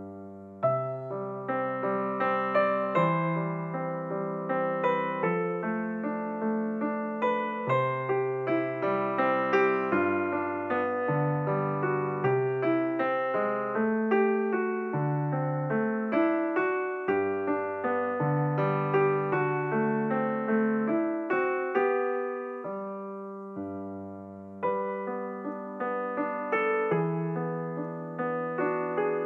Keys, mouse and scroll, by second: 3.2 KP_1, 5.5-7.0 drag, 11.0 KP_7, 13.2 s, 16.5 g, 20.2-20.7 scroll down 2, 20.8 click, 21.4 click, 21.9 click, 22.6 click, 23.2 click, 25.4-25.9 middle drag, 27.4-28.2 scroll down 3, 28.7 click.